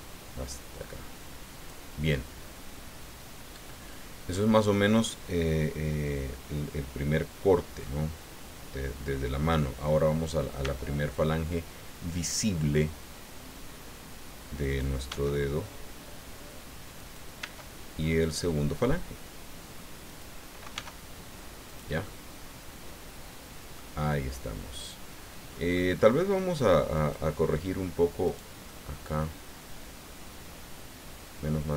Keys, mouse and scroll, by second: 10.6 e, 14.6 click, 15.1 s, 16.9 click, 17.4 e, 20.0 click, 20.7 s, 21.6 click, 22.0-23.9 middle drag, 24.0-25.9 middle drag, 26.9 click, 28.2 right click, 28.7-31.7 middle drag.